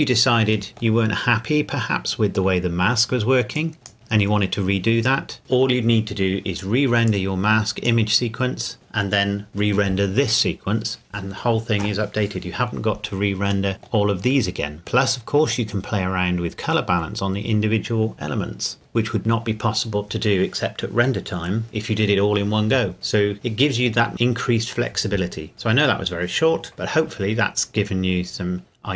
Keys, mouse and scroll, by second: 0.7 middle click, 1.1-2.6 scroll up 2, 2.6 middle click, 3.6 click, 3.9-5.4 scroll down 1, 7.1 click, 13.0-13.5 scroll up 1, 13.5 scroll down 1, 13.7 middle click, 15.7-17.1 scroll up 1, 18.7 middle click, 27.8 scroll down 1.